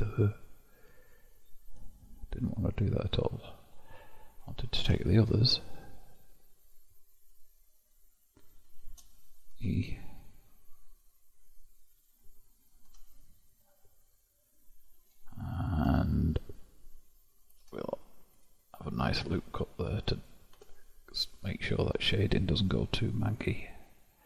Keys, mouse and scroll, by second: 2.6-4.4 middle drag, 4.4 click, 5.3 shift+click, 6.2 shift+click, 6.7 shift+click, 7.3 shift+click, 7.9-9.6 shift+drag, 9.6 e, 13.0 Tab, 13.9-16.0 middle drag, 16.0 Tab, 17.7 ctrl+r, 21.5-24.0 middle drag, 24.0-24.2 scroll up 4.